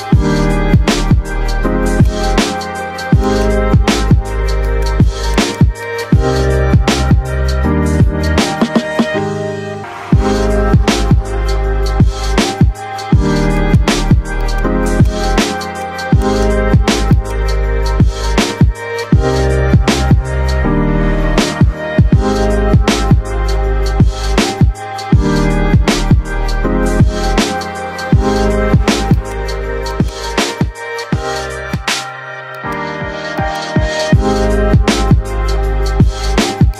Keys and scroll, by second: 8.6 shift+Home, 8.9 Caps_Lock, 9.3 p, 9.7 o, 11.2-12.8 typing, 14.6 c, 17.7 shift+Home, 21.2-28.2 typing, 34.3 ctrl+j.